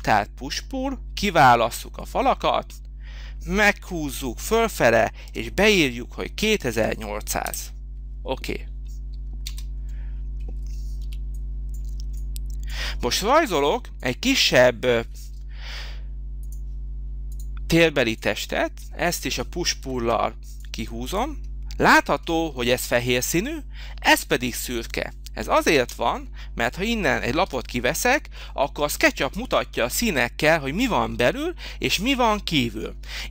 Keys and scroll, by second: 4.7 2, 5.3 8, 6.5 0, 7.4 Return, 9.4 space, 10.9 h, 20.0 p, 25.7 space, 27.4 Delete.